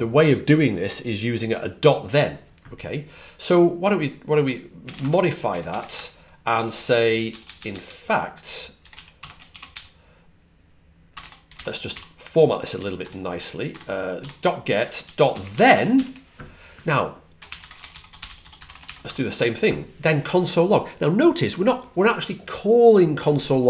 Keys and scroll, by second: 5.4-9.3 typing, 11.3-16.0 typing, 17.2-19.0 typing.